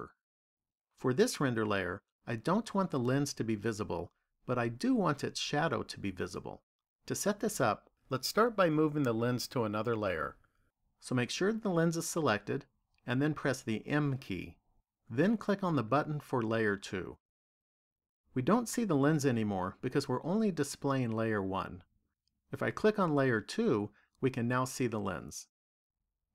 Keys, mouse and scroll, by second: 13.8 m, 23.7 click.